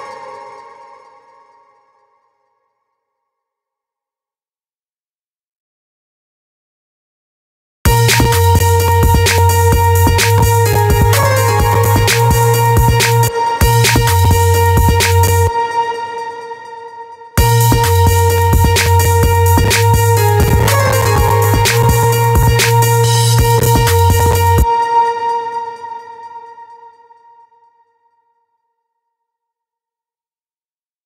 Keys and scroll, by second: 7.2 space, 13.2 space, 14.9 space, 17.0 space, 24.2 space, 30.6 space.